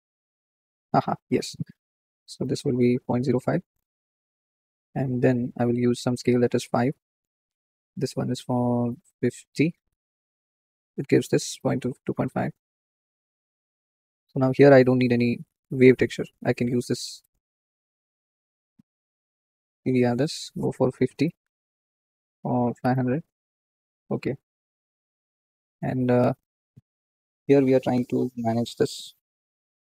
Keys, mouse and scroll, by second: 3.2-4.9 drag, 6.5-10.0 drag, 10.0-11.2 scroll up 3, 11.2-12.7 drag, 12.7-13.2 scroll down 3, 13.2-14.8 shift+middle drag, 15.1-17.0 alt+drag, 17.2 x, 17.9 shift+middle click, 18.8-19.6 scroll up 1, 19.6 click, 20.1-23.0 drag, 23.0 KP_0, 24.2-26.3 drag, 27.0-27.5 scroll up 1, 27.5-29.9 middle drag.